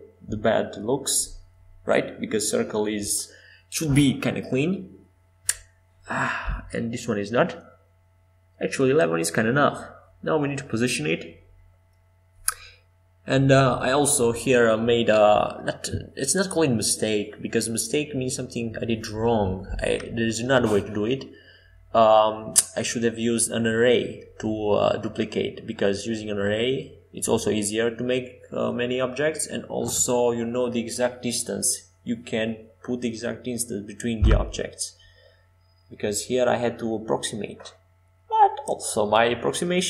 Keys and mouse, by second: 2.5 click, 4.5-8.9 typing, 9.9 KP_7, 13.8-16.9 drag, 21.1-23.5 drag, 22.0 s, 24.4-27.5 drag, 26.6 shift+d, 32.7 shift+d, 38.7 shift+d.